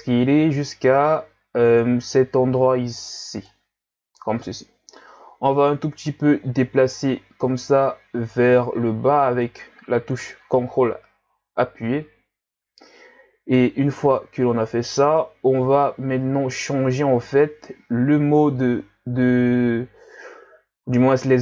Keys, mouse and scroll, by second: 5.5-8.6 ctrl+drag, 14.3-15.4 scroll up 1.